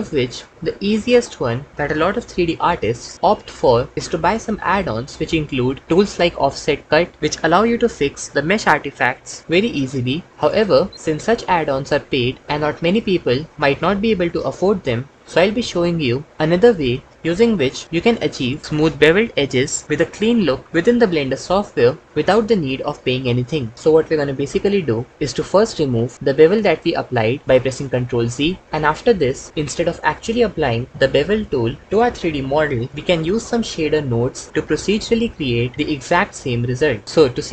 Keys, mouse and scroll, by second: 25.5 ctrl+z, 25.6 ctrl+z, 26.2 ctrl+z, 27.7 Tab.